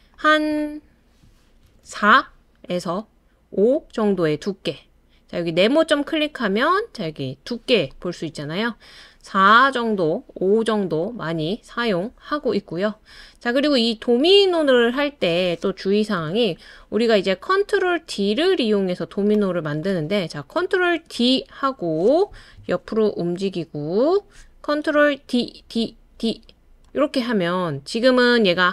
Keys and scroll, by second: 1.6 super+c, 1.8 super+v, 16.2 BackSpace, 20.9 super+d, 22.6 Right, 23.1 Right, 23.2 Right, 23.2 Right, 23.3 Right, 23.4 Right, 25.3 super+d, 25.7 super+d, 26.2 super+d.